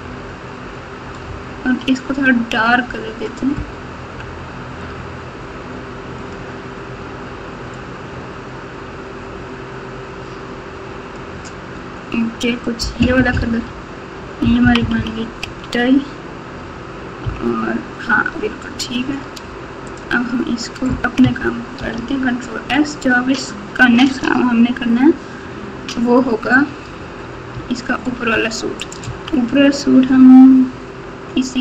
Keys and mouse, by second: 1.0 KP_6, 1.3 KP_6, 1.4 KP_6, 12.7-15.4 typing, 17.2 KP_1, 21.8 ctrl+s, 26.9 Tab, 27.5 Tab, 28.8 click, 29.0 Tab.